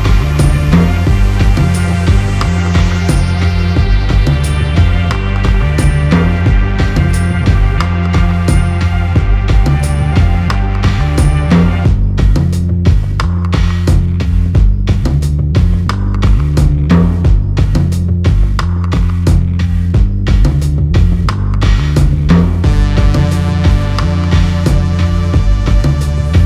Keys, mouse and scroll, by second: 2.8 Tab, 3.5 click, 4.0 Tab, 4.7 Tab, 6.4 click, 7.6 Tab, 9.3 click, 9.9 Tab, 10.7 click, 11.1 click, 14.6 shift+click, 15.3 right click, 19.1 click, 19.6 click, 24.3 click.